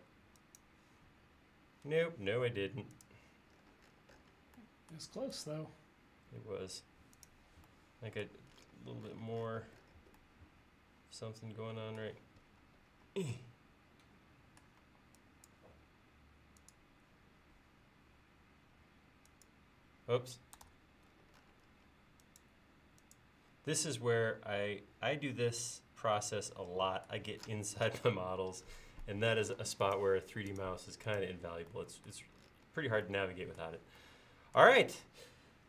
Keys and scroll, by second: 14.9 e, 20.7 super+z, 29.6 space.